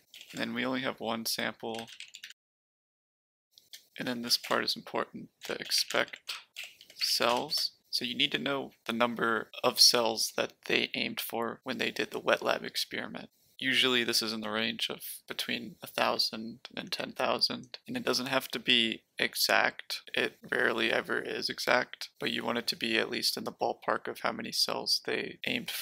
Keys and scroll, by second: 0.0-0.2 typing, 1.4-7.7 typing.